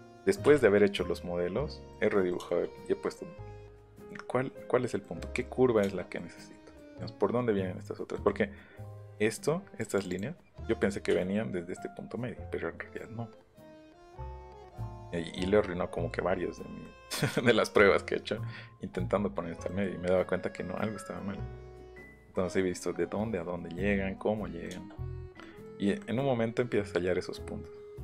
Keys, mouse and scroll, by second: 0.4 Escape, 1.9 middle click, 2.3 middle click, 3.8 middle click, 5.0 middle click, 5.8 shift+middle click, 6.7 middle click, 8.1 middle click, 8.9 click, 9.8 click, 16.8 middle click, 17.2 middle click, 19.6 middle click, 22.5 middle click, 24.6 shift+middle click, 25.4 middle click, 26.0 middle click, 26.3 middle click.